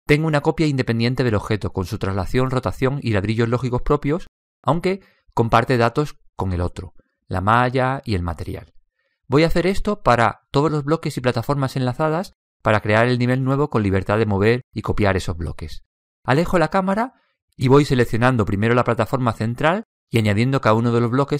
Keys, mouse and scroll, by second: 1.2-3.5 middle drag, 18.8-21.3 right drag.